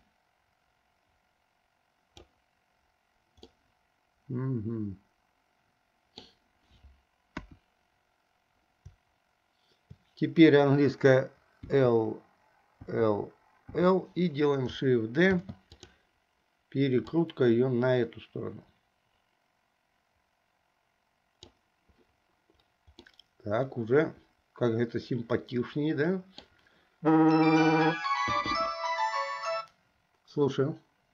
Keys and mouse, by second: 0.0-2.3 drag, 3.5-4.7 middle drag, 4.7-6.4 drag, 4.7-6.4 right drag, 7.4 KP_1, 11.7 l, 13.0 l, 13.8 l, 15.4 shift+d, 17.3-21.5 drag, 23.2-26.6 middle drag.